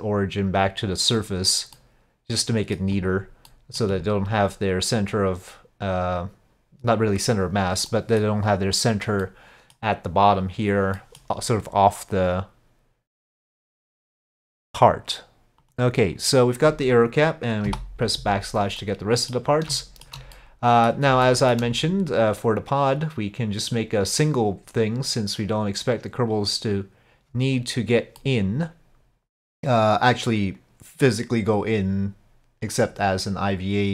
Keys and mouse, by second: 1.8-2.8 middle drag, 3.0 click, 3.5 middle click, 3.9 click, 7.9-8.2 middle drag, 9.3-9.8 middle drag, 11.0 middle drag, 13.3 click, 16.2-17.7 drag, 17.7 KP_Divide, 18.8-19.2 middle drag, 19.2 click, 19.8 middle drag, 20.4-20.9 middle drag, 21.3 shift+middle drag, 24.2-27.9 drag, 28.2-29.4 middle drag, 32.8-33.9 drag.